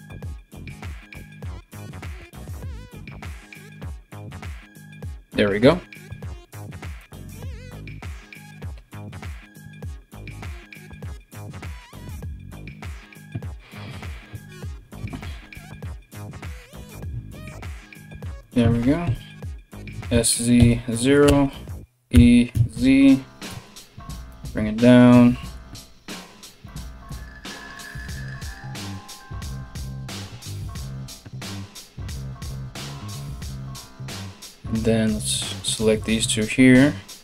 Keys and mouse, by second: 1.1 alt+right click, 2.5 w, 5.7 s, 8.5 right click, 9.7 ctrl+right click, 10.3 g, 11.1 g, 13.5 KP_3, 15.8 3, 16.4 right click, 16.5 ctrl+middle click, 16.9 right click, 17.1 middle click, 17.2 right click, 17.4 middle click, 18.0 right click, 18.1-37.2 middle drag, 18.6 KP_3, 19.5 s, 21.7 e, 26.3 1, 26.7 right click, 27.3 g, 29.4 3, 32.1 KP_3, 34.6 right click, 35.2 shift+right click, 35.8 KP_3, 36.8 e.